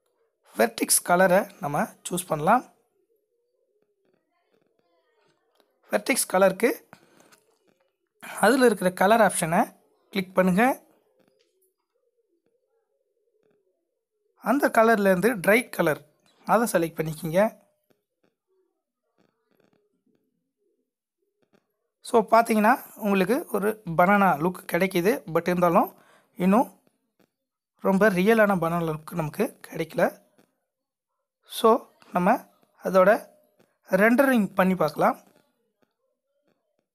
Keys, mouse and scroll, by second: 15.3 click, 15.4 click, 20.2 click, 22.3 middle click, 33.3 click.